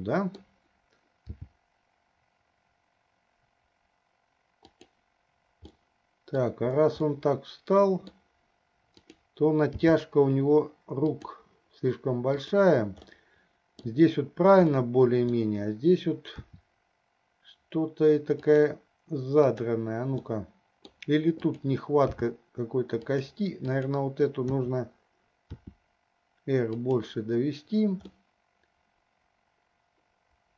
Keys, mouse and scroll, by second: 0.0 middle click, 1.5 g, 6.0 middle click, 7.2-8.4 middle drag, 9.2 click, 10.0 g, 12.5 click, 13.3 middle click, 14.9 middle click, 16.7 r, 19.7 click, 20.5-21.3 middle drag, 21.6 click, 22.3 g, 23.8 click, 24.7 e, 25.5 r, 28.3-30.5 middle drag.